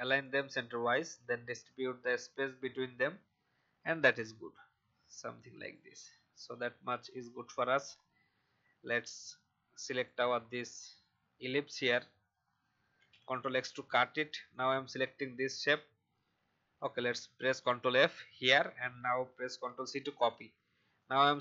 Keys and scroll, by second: 12.9 ctrl+x, 16.9 ctrl+f, 19.6 ctrl+c.